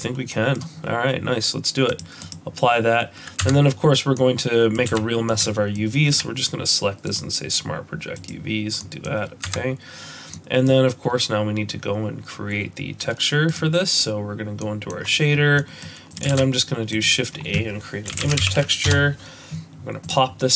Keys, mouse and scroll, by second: 1.9 click, 2.2 click, 3.4 Tab, 4.2 middle click, 4.9 a, 5.3 middle click, 6.1 u, 8.8 middle click, 9.5 Tab, 10.3 middle click.